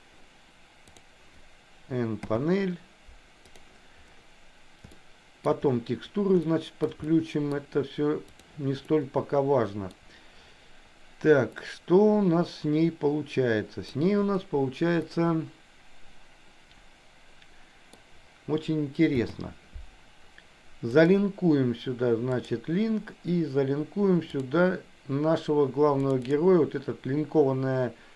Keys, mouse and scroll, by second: 4.9 shift+middle click, 6.4 shift+middle click, 7.1 middle click, 8.8-10.0 middle drag, 11.6-14.0 middle drag, 15.1-17.9 middle drag, 19.2 n, 21.1-22.7 drag.